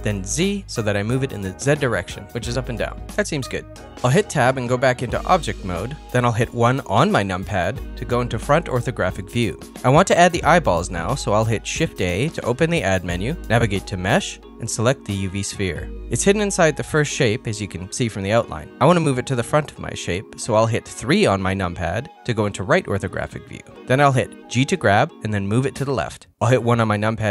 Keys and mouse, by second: 2.1 middle click, 3.3 middle click, 4.3 Tab, 6.8 KP_1, 10.4 shift+a, 21.3 KP_3, 22.9 g.